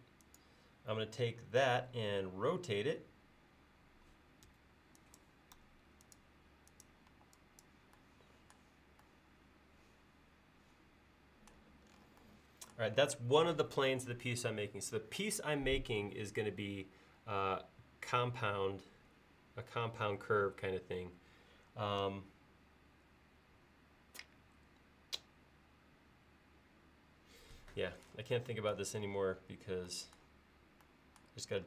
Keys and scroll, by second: 1.7 q, 7.2 e, 13.2 space.